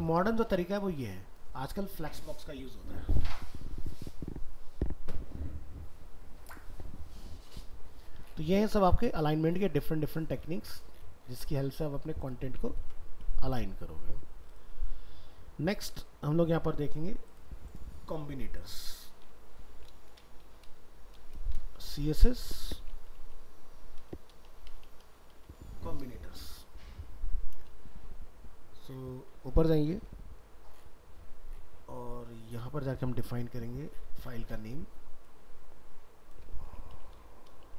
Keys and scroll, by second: 12.8 ctrl+w, 19.2 alt+移, 22.4 ctrl+shift+Left, 29.9 ctrl+Home.